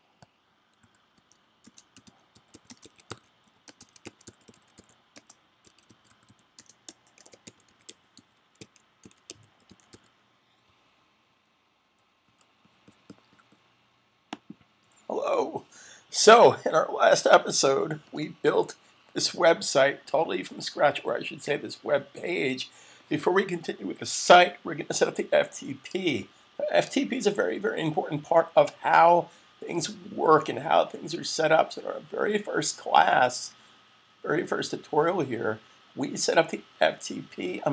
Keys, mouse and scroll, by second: 0.3-12.1 typing, 13.9-14.6 typing, 14.1 click, 16.1-16.8 typing.